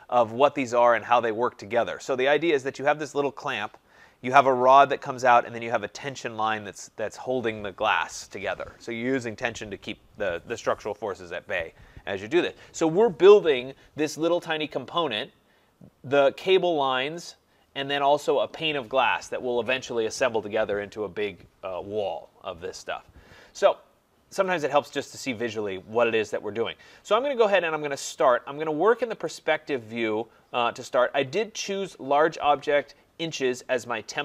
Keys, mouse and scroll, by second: 24.6 click, 29.0 click, 29.3 click, 30.1 middle click, 30.2 middle click.